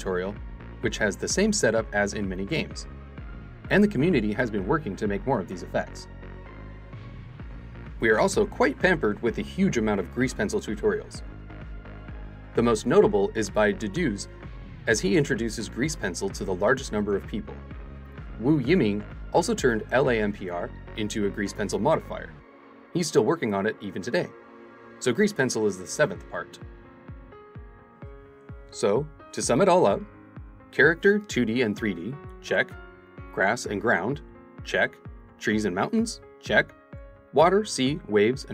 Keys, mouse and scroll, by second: 0.3 scroll up 2, 1.1 click, 2.0-9.6 drag.